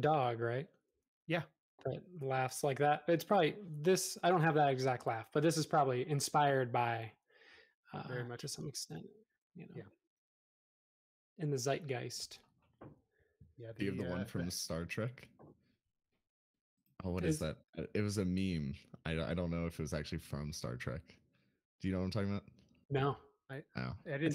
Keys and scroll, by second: 3.4 space, 9.7 BackSpace, 14.1 BackSpace, 23.1 l.